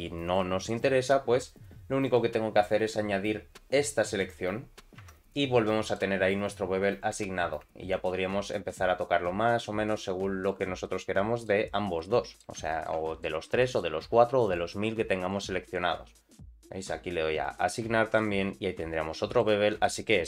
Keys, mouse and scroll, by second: 0.4 middle click, 2.0 click, 4.2 click, 5.0 Tab, 5.3 middle click, 7.0 click, 7.9-10.5 shift+drag, 10.8 middle click, 11.6-12.0 scroll down 2, 12.0 middle click, 12.7 shift+middle click, 13.0 middle click, 13.4 Tab, 13.6 middle click, 14.0 2, 14.4 click, 15.2 ctrl+click, 16.3 click, 17.3 click, 18.0 Tab, 18.1-19.4 middle drag, 19.5-19.8 scroll down 2, 19.8 middle click.